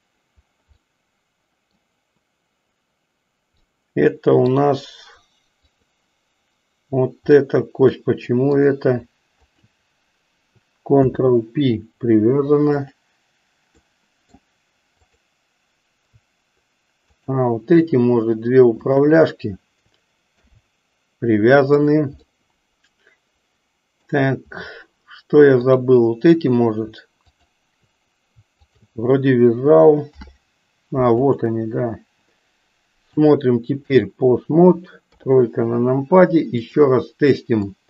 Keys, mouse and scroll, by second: 0.7-1.7 middle drag, 3.7 middle click, 5.5 click, 7.4-8.6 middle drag, 10.9 ctrl+p, 12.8 click, 13.9 middle click, 17.0 shift+click, 18.9 shift+click, 20.2 ctrl+p, 21.6 click, 22.2-24.0 middle drag, 25.6 click, 27.2 shift+click, 28.5 shift+click, 30.1 ctrl+p, 33.1 click, 35.0 KP_3, 36.5 click, 37.6-37.8 drag.